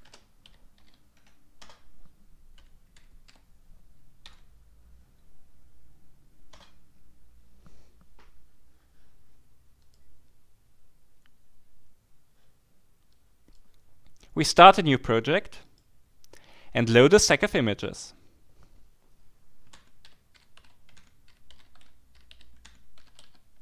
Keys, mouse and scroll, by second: 0.0-0.8 typing, 1.1 Tab, 1.6 Return, 2.3-4.2 typing, 4.3 Tab, 6.5 Return, 13.1 click, 15.6 click, 17.8 click, 19.5-23.6 typing.